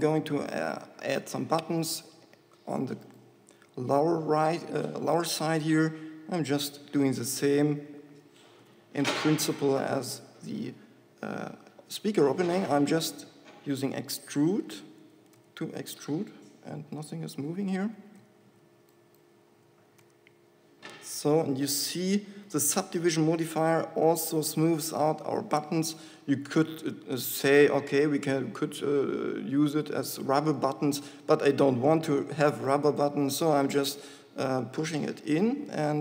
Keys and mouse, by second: 2.1 Tab, 8.9 shift+e, 17.5 right click, 18.4 g, 20.0 e, 31.2 Tab, 34.0 Tab, 35.4 g.